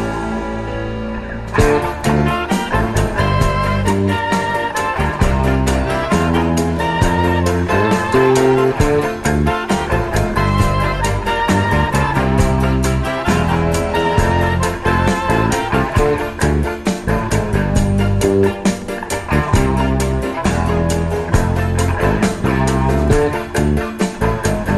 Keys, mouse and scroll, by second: 13.7-16.4 drag, 16.7-17.8 drag.